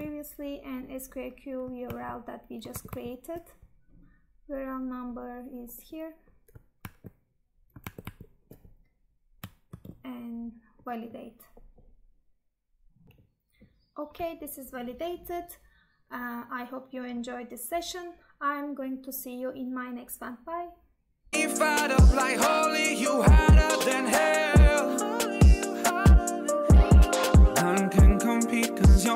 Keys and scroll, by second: 2.8 alt+Tab, 7.0 Tab, 7.9 alt+Tab, 9.8 ctrl+v.